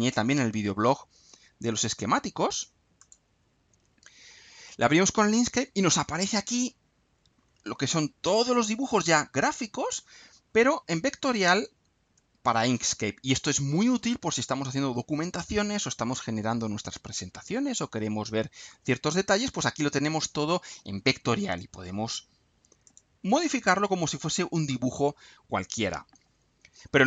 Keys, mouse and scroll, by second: 3.0 click, 6.7 scroll down 2, 7.2-7.9 scroll up 2, 9.8-10.2 scroll down 2, 11.5 click, 19.2-19.6 scroll down 2, 19.9-20.5 scroll up 2, 22.8 click.